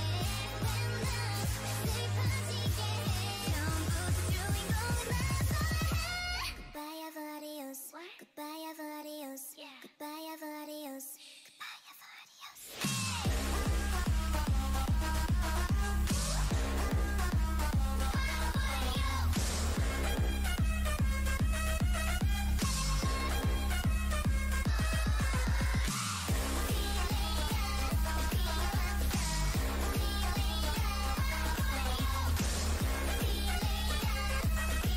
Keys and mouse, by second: 0.5 middle click, 2.7 Tab, 4.1 ctrl+KP_Add, 4.3 ctrl+KP_Add, 6.6 w, 7.5 w, 8.0 Tab, 11.3 Tab, 12.6-14.2 drag, 14.2 e, 17.0 e, 18.9 s, 22.1 e, 23.4 e, 24.7 s, 25.4 click, 31.2 KP_3, 32.2 KP_1, 34.6 c.